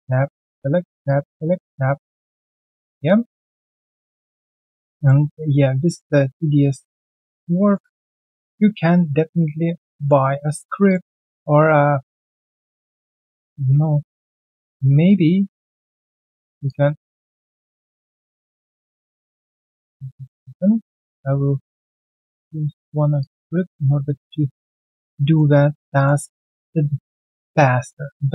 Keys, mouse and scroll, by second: 0.2-1.2 typing, 0.4 middle click, 1.4 middle click, 3.3 middle click, 3.4-4.2 typing, 4.4 middle click, 5.6-7.7 typing, 6.4 middle click, 7.4 middle click, 8.2 scroll down 2, 8.5 alt+middle click, 10.3 right click, 18.9 right click, 21.0 double click, 21.4 ctrl+right click, 24.0 alt+middle click, 24.2-24.5 alt+scroll down 1, 24.5 alt+click, 24.8 alt+right click, 25.1 alt+middle click, 26.3 double click, 26.6 q, 27.7 alt+right click, 28.2 alt+middle click.